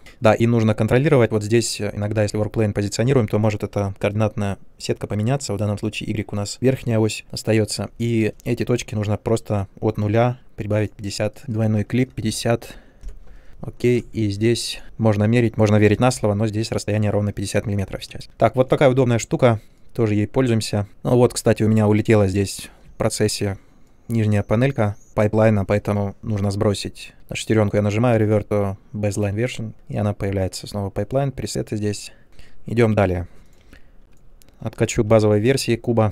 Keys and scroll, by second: 12.2-13.0 typing, 13.0 Return, 13.9 ctrl+space, 18.1 ctrl+space.